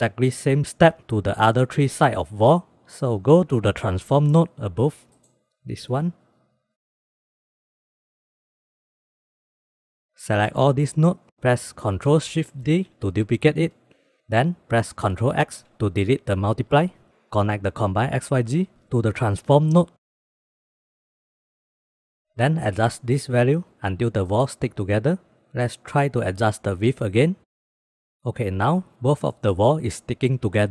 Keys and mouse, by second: 3.5 middle click, 4.8 middle click, 5.5-6.6 drag, 6.8 click, 7.1 middle click, 7.4 middle click, 7.8-8.4 drag, 8.6 shift+drag, 9.1 g, 9.6 click, 9.9 click, 10.4-11.3 drag, 12.7 ctrl+shift+d, 14.5 click, 14.9-15.5 drag, 16.0 ctrl+x, 17.1 drag, 17.6-18.8 drag, 19.6 drag, 20.0 shift+middle drag, 20.1 middle drag, 20.4 shift+middle drag, 20.7 middle click, 21.2 shift+middle click, 21.8 shift+b, 22.3 middle click, 22.4-23.1 drag, 23.6-24.9 drag, 26.5 click, 27.1 click, 27.3 click, 27.8 click, 29.5 click, 29.7 click, 30.5 click.